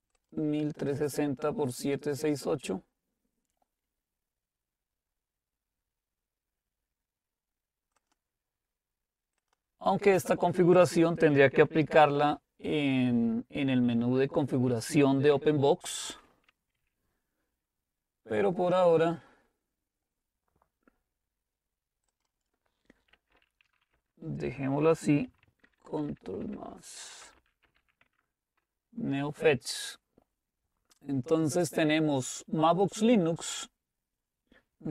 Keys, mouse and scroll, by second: 0.2-3.0 drag, 8.0-10.9 drag, 22.6 click, 22.9-24.3 typing, 25.6 ctrl++, 25.6 typing, 25.9 ctrl++, 26.1 ctrl++, 26.4 ctrl++, 27.1-28.3 typing, 28.4 Return.